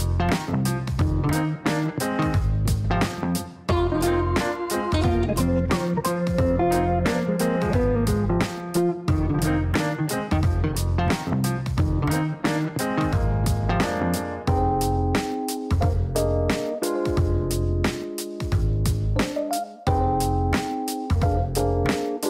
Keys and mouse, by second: 4.2 click, 5.7 click, 6.5 click, 7.5 click, 8.4 click, 9.0 right click, 12.1 click, 13.2 click, 14.1 click, 14.6 click, 16.5 click, 17.2 click, 18.5-20.9 typing, 22.0-22.2 typing, 22.1 KP_Add.